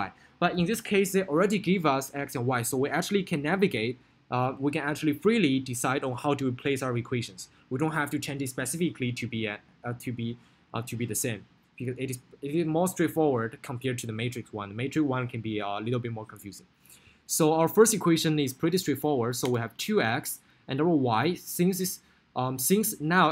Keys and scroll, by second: 18.9 2, 19.5 Return.